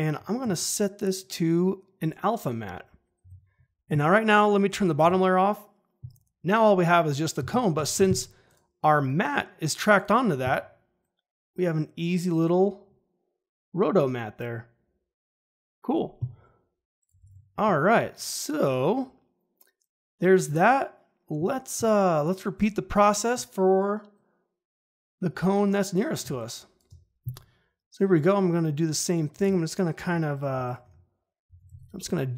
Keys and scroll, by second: 0.4 F4, 17.1 ctrl+`, 26.2 space, 31.4 ctrl+c, 31.6 ctrl+v.